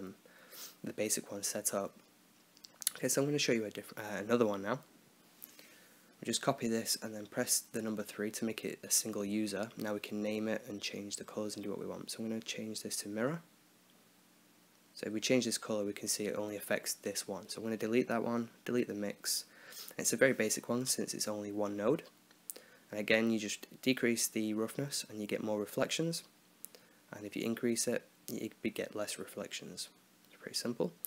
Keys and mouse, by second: 0.7-1.8 right drag, 1.3 h, 3.0-4.1 drag, 3.7-4.8 right drag, 4.9-5.9 drag, 7.3-11.9 drag, 11.9 r, 14.1 middle click, 15.1-16.1 drag, 16.7 middle click, 16.9-17.9 right drag, 17.7 x, 18.0-19.1 right drag, 19.0 ctrl+x, 19.1 middle click, 20.6-21.6 drag, 23.0-24.1 drag, 24.1-25.2 middle drag, 25.4-27.9 middle drag, 28.0-29.1 drag.